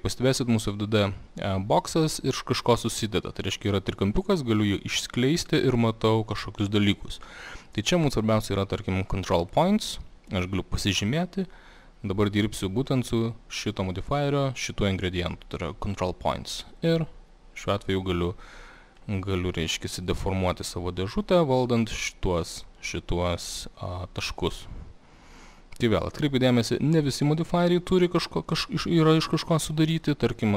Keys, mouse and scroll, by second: 4.9 click, 9.4 click, 16.9 click, 19.0 click, 20.1 click, 21.2 click, 22.7 click, 23.6 click, 26.1 click, 28.8 click, 30.0 click.